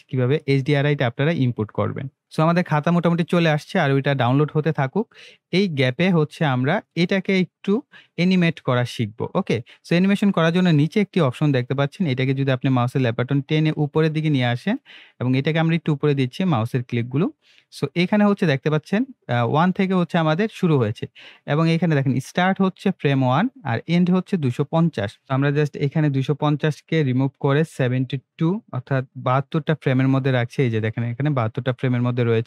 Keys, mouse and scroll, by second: 0.3-1.9 drag, 2.2 scroll up 1, 5.9-7.1 middle drag, 7.4 scroll down 1, 7.7 scroll up 1, 12.1-13.9 drag, 25.3 BackSpace, 30.8-32.4 drag.